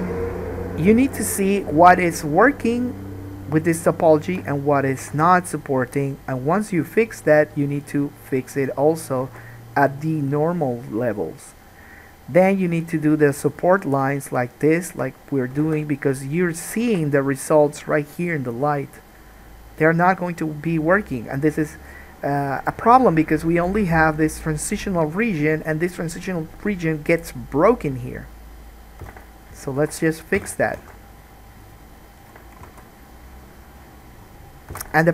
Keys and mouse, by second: 3.7 click, 3.8 middle click, 4.1 shift+click, 4.5-9.3 middle drag, 5.2 g, 9.3 alt+click, 9.5 alt+a, 9.5-13.7 middle drag, 13.7 click, 14.2 shift+middle click, 14.8 shift+click, 15.2-29.8 middle drag, 15.7 g, 17.2 alt+a, 29.2 3, 29.8 shift+click, 30.0-31.8 middle drag, 30.5 f, 30.9 alt+a, 31.8 click, 32.2-35.1 shift+middle drag, 32.9 alt+a, 34.9 1.